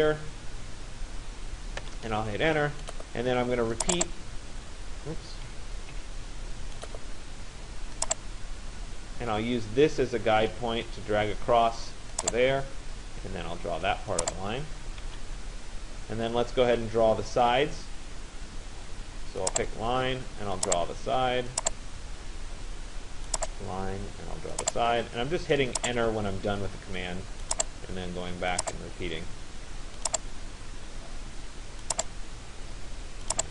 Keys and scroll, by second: 1.4 Return, 5.5 Escape, 14.6 Return, 21.7 Return, 26.0 Return, 30.3 Return.